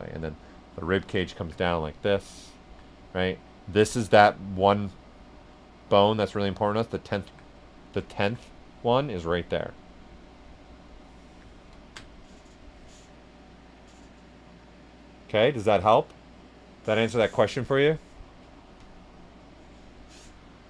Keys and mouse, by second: 0.5 alt+click, 1.5 alt+right click, 2.1 alt+click, 3.3 alt+click, 4.4-7.5 alt+drag, 7.5 right click, 8.0 right click, 8.4 right click, 11.0 right click, 11.7 ctrl+alt+right click.